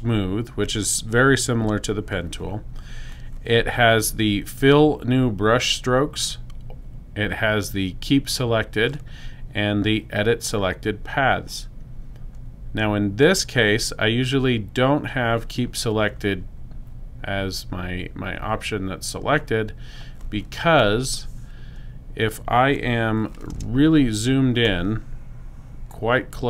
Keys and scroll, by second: 23.9 super+space.